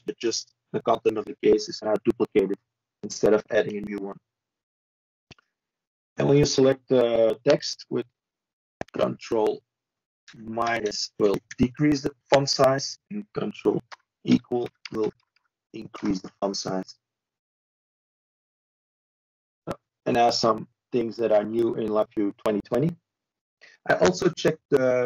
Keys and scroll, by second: 16.7 shift+Return.